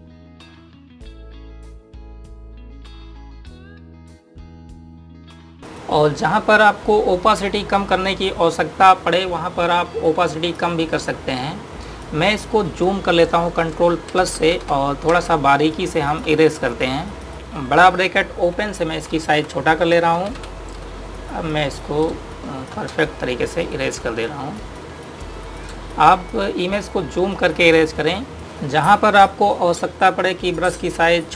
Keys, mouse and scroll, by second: 10.7 click, 14.9 ctrl+=, 15.1-15.9 typing, 17.7 click, 19.4-21.1 typing, 21.6 click, 22.9 space, 23.0 click, 23.4 space, 23.8 click, 26.4 space, 26.7 click, 26.9 space, 27.6 click, 28.4 space.